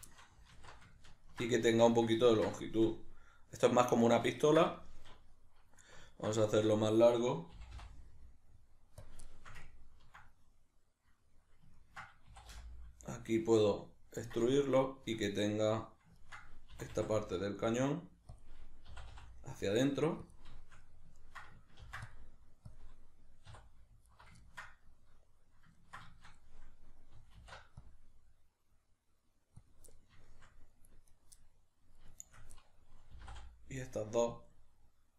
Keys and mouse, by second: 0.1-9.1 shift+middle drag, 0.5 alt+q, 1.6 alt+q, 7.6 g, 9.1 click, 9.2-12.3 shift+middle drag, 12.3 e, 14.3 click, 14.6-18.4 ctrl+middle drag, 16.8 e, 18.4 click, 18.9 e, 20.4 click, 20.6-23.5 shift+middle drag, 21.8 ctrl+r, 22.8 click, 23.5 3, 24.1 alt+right click, 24.4-29.7 ctrl+middle drag, 27.3 alt+e, 29.7 click, 29.9-31.1 middle drag, 31.1 right click, 31.3 middle click, 32.2 shift+right click, 32.5-35.1 middle drag, 33.1 e.